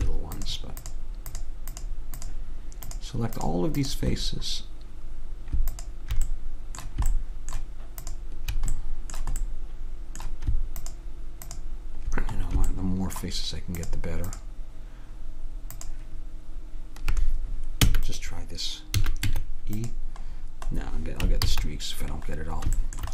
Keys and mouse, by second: 0.5-4.3 drag, 4.4-7.7 drag, 7.7 middle click, 8.1-9.9 drag, 9.9 middle click, 10.9-17.7 drag, 17.9 e, 19.1 a, 19.3 Tab, 21.5 ctrl+z.